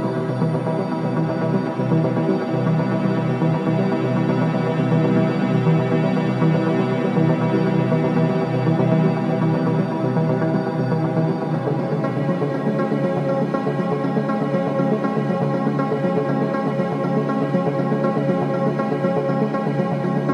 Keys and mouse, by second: 8.2 click, 10.4 Tab, 11.7-12.3 drag, 12.3-15.0 middle drag, 15.0 z, 19.1-20.0 middle drag.